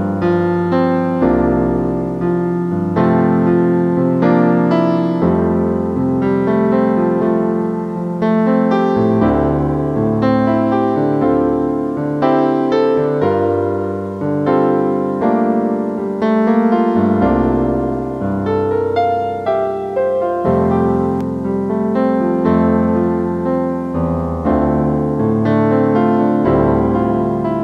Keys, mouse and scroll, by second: 0.5 typing, 1.0 middle click, 6.0 right click, 8.2 middle click, 10.8 right click, 14.6 typing, 16.4 typing, 17.7 right click, 20.9-23.6 typing, 25.2-27.6 typing, 25.5 right click.